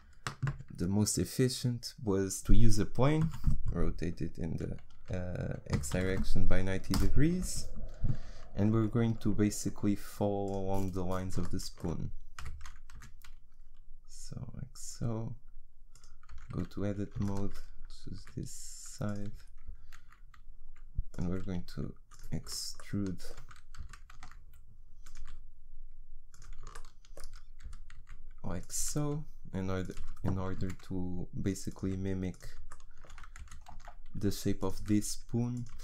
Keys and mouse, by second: 3.2 r, 7.3 z, 8.8 s, 12.4 g, 16.3 Tab, 18.2 s, 19.7 e, 21.3 s, 23.8 e, 25.2 s, 27.7 e, 28.8 s, 30.0 e, 31.9 s, 33.4 e, 34.8 s, 35.7 e.